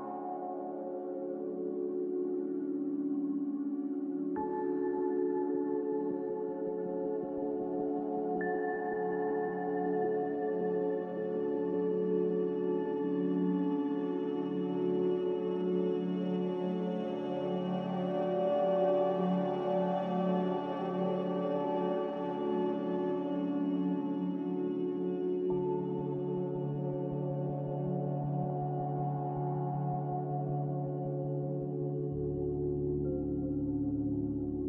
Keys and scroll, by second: 24.4-25.8 typing, 28.9-29.6 typing, 31.3-32.9 typing.